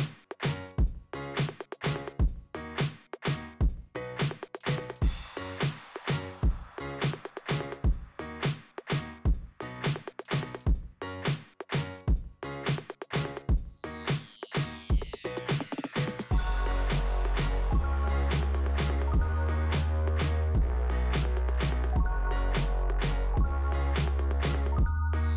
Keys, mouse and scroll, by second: 1.0-1.3 scroll down 2, 3.7 scroll up 1, 5.3 scroll down 2, 9.5 scroll up 1, 11.5 scroll down 2, 16.1 middle click, 17.8 click, 19.9 click, 20.1 click.